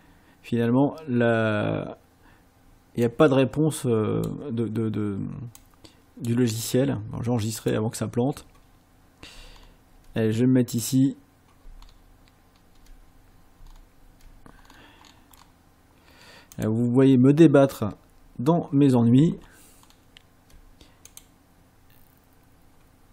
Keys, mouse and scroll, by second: 3.1-4.4 drag, 5.6 click, 7.6 click, 9.5-9.9 ctrl+scroll up 2, 10.9 click, 11.8 ctrl+scroll up 2, 12.5 ctrl+scroll up 2, 13.7 ctrl+scroll up 2, 14.7-15.5 scroll down 6, 16.6 click, 19.4-20.1 ctrl+scroll up 4, 21.1 click.